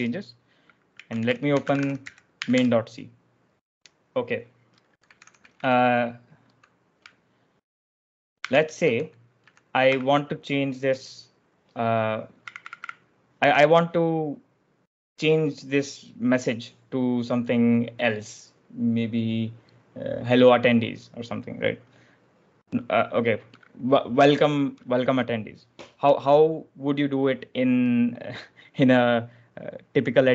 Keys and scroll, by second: 0.6-2.8 typing, 4.7-5.9 typing, 8.1-9.8 typing, 12.3-13.3 typing.